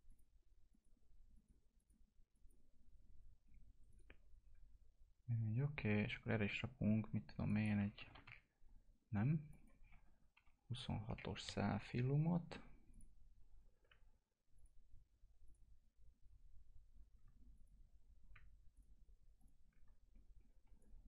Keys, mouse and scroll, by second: 7.4 click, 8.0 4, 9.5 click, 9.8 2, 12.4-13.2 typing, 12.9 click, 20.8 shift+click.